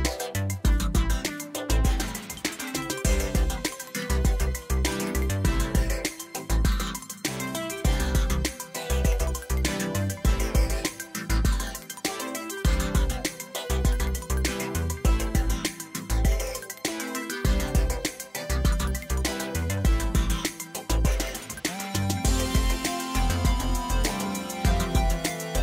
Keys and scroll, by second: 1.1 Tab, 4.1 e, 6.1 2, 7.2 ctrl+z, 8.5 ctrl+b, 12.1 Tab, 16.4 shift+d, 16.7 y, 18.0 Return, 19.0 alt+a.